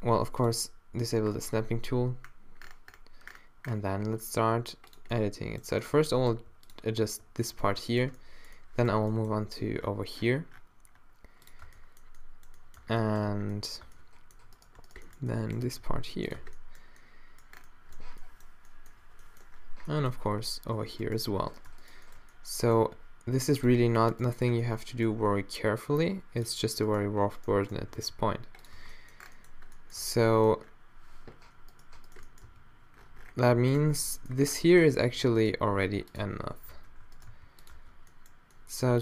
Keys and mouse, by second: 3.3 g, 5.1 click, 6.4 g, 7.0 z, 7.5 click, 8.4 middle click, 8.9 z, 9.3 g, 11.7 Tab, 12.8 Tab, 13.3 Tab, 13.9 Tab, 15.7 g, 16.3 Tab, 20.8 Tab, 22.1 middle click, 22.8 g, 25.2 g, 28.0 g, 28.8 Tab, 29.0-30.0 middle drag, 30.0 Tab, 32.5 g, 33.8 Tab, 34.9 Tab, 35.7 g, 36.2 click, 36.2 Tab, 36.7 Tab, 37.3 g, 37.8 Tab, 38.1 middle click, 38.9 Tab.